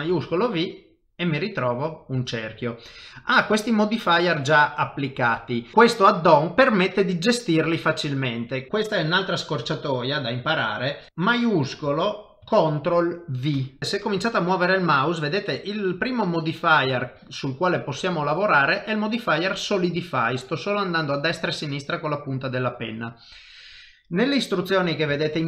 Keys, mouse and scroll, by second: 2.6 shift+middle click, 13.5 ctrl+shift+v.